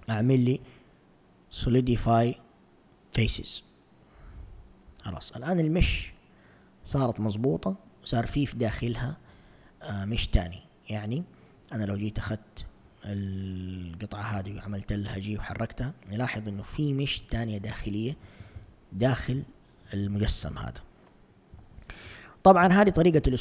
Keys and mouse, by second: 4.4 a, 4.9 Tab, 10.3 Tab, 12.3 alt+click, 14.4 g, 20.4 1, 21.6 a, 23.3 Tab.